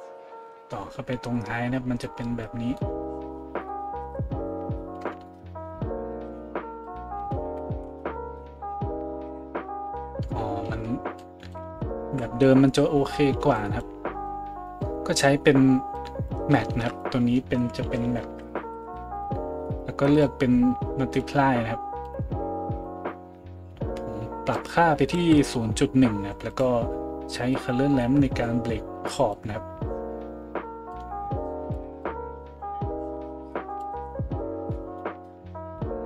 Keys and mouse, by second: 12.0 Delete, 13.8 middle click, 14.3-19.8 drag, 16.7 shift+a, 19.8-20.1 middle drag, 20.1-24.6 drag, 24.6-26.5 middle drag, 25.2 Delete, 26.5 click, 26.7-27.5 middle drag, 27.5-36.0 drag.